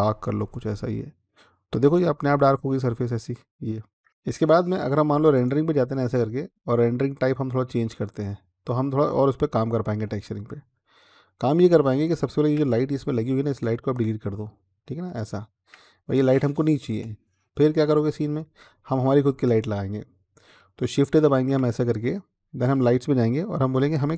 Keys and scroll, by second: 16.7 Delete, 21.1 a.